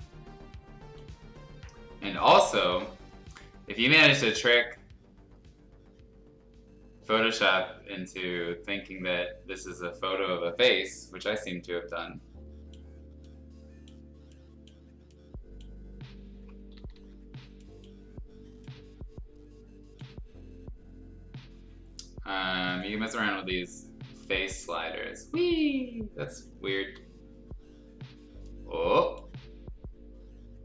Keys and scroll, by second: 11.0 ], 16.7 ctrl+z, 26.8 ctrl+z.